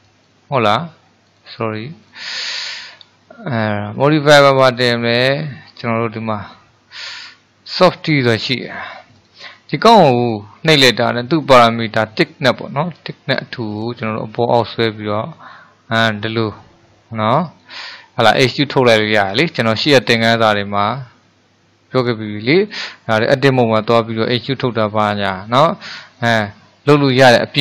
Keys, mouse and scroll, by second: 0.1 click, 0.1-1.4 right drag, 2.1-5.2 drag, 13.0-16.1 drag, 16.6-25.4 middle drag, 25.6-27.6 middle drag.